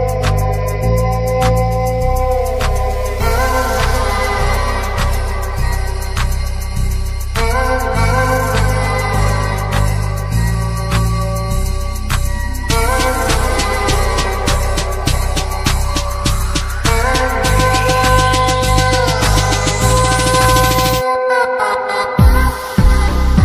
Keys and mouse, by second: 1.0 click, 4.8-5.9 middle drag, 6.2 middle click, 6.5 shift+a, 10.1-10.8 typing, 10.9-11.7 drag, 13.7-14.4 drag, 18.6-20.7 drag, 20.7 Tab, 22.6 Tab.